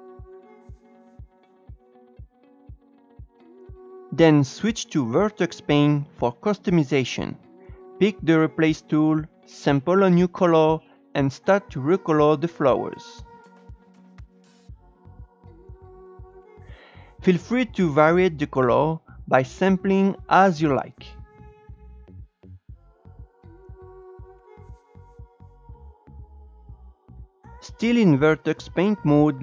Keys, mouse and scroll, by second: 0.0-3.3 typing, 0.0 scroll down 4, 0.2 click, 0.4 shift+middle click, 0.4 scroll up 2, 0.6 click, 0.7 click, 0.9 click, 1.0 click, 1.5 click, 1.6 click, 1.8 scroll up 3, 1.9 click, 2.0 click, 2.1 scroll down 3, 2.2 scroll up 1, 2.2 click, 2.5 click, 2.6 click, 2.8 Tab, 3.0 Tab, 3.2 ctrl+z, 3.3 click, 3.7 Tab, 7.4-8.8 drag, 8.8-9.8 scroll up 1, 9.8 e, 13.9-17.1 drag, 17.1 e, 17.5-18.5 drag, 18.5 shift+middle click, 18.8 e, 19.3 click, 19.8 shift+middle click, 19.9 click, 20.2 e, 20.5 click, 20.7 e, 21.0 shift+middle click, 21.9 ctrl+z, 22.0 e, 22.6 click, 22.9 ctrl+z, 23.0 ctrl+z, 23.3 click, 23.4 ctrl+z, 23.5 shift+middle click, 23.7 click, 24.0 scroll down 3, 24.1 scroll up 5, 24.3 click, 24.5-25.1 scroll down 4, 24.6 shift+middle click, 25.1 scroll up 1, 25.2 e, 25.6 scroll up 2, 25.9 click, 26.1 scroll down 4, 26.2 scroll up 1, 26.3 click, 26.6 scroll down 1, 26.7 shift+middle click, 26.7 scroll up 3, 26.9 click, 27.0 Tab, 28.8 click.